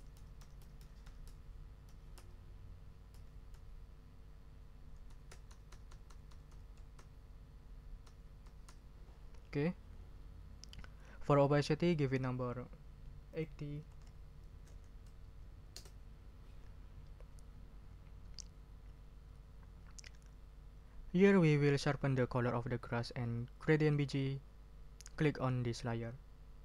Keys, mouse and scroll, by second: 3.1 Down, 5.0 Right, 8.0 Right, 13.3 ctrl+click, 13.9 ctrl+a, 14.4 ctrl+8, 14.7 0, 15.7 Return.